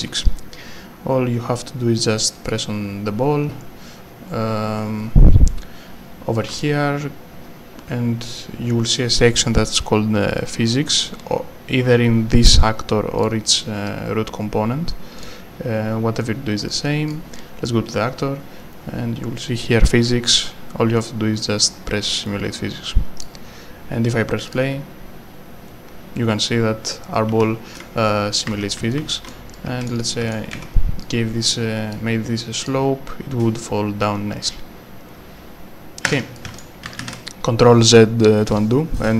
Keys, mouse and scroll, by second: 2.5 click, 4.5 scroll up 1, 5.0-6.4 scroll up 1, 6.6 s, 7.8 w, 8.1 scroll down 1, 13.2 click, 14.1 scroll up 1, 15.2 click, 23.2 click, 26.9 right click, 28.5 w, 28.9 right click, 29.0 a, 29.5 right click, 29.6 w, 30.0 click, 30.1 right click, 30.2 w, 31.0 click, 36.1 Escape, 36.4 w, 37.0 ctrl+z.